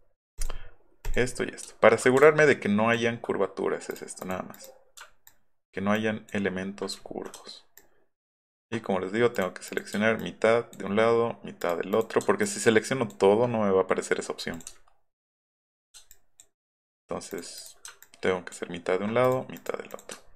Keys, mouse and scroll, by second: 1.7 alt+middle click, 2.2 ctrl+click, 3.9 click, 4.2 click, 4.6 click, 5.3 ctrl+click, 6.0 ctrl+click, 7.0 alt+scroll up 1, 7.8 ctrl+click, 9.3 click, 9.7 click, 10.2 ctrl+click, 11.6 click, 11.9 click, 12.4 ctrl+click, 14.5 click, 14.8 alt+middle drag, 15.1 alt+middle drag, 15.3 alt+middle drag, 15.5 alt+middle click, 16.1 ctrl+click, 17.3 click, 17.6 click, 18.0 ctrl+click, 19.2 click, 20.2 alt+middle click.